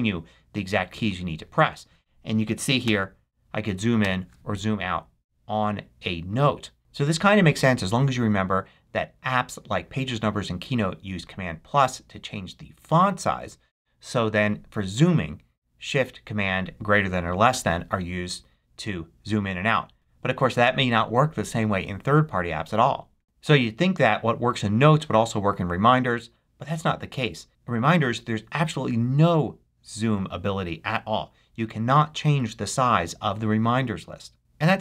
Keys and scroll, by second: 2.7 shift+super+., 3.9 shift+super+,.